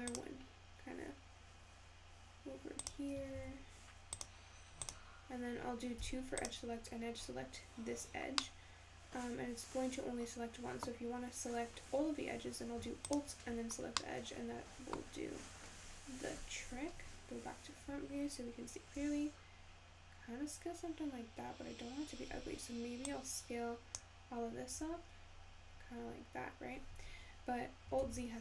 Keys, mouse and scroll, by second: 3.3 ctrl+r, 6.0 2, 6.5 click, 7.3-8.2 scroll up 3, 8.5-11.5 middle drag, 13.1 alt+click, 13.9 scroll up 1, 14.1 middle click, 15.0-17.1 scroll down 2, 17.1 `, 19.0 s, 23.2 click, 24.8 s, 28.0 alt+z.